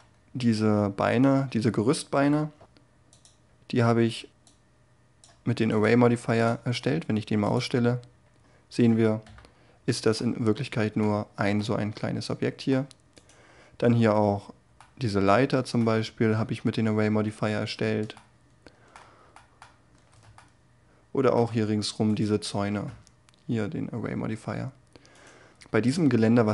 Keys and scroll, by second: 1.7 ,.